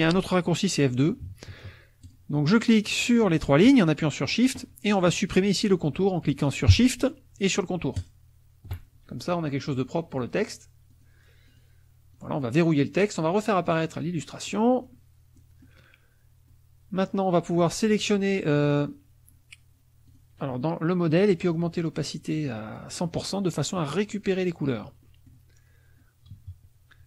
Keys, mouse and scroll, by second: 2.0 shift+click, 3.1 shift+click, 8.0 shift+click, 10.1 click, 10.9 click, 11.5 click, 12.1 click, 13.6 click, 14.5 middle click, 15.4 middle click, 16.4 middle click, 17.9 click, 20.1 click, 21.5-22.9 drag, 25.1 middle click, 26.4 KP_Subtract.